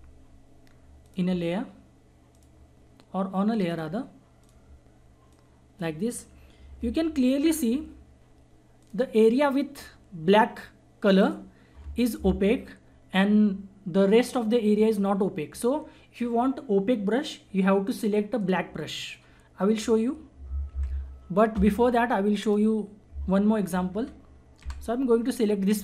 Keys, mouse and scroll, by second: 1.0 click, 6.9 ctrl+=, 8.8 click, 11.2 click, 18.3 click, 20.7 ctrl+d, 22.4 click, 24.8 Delete.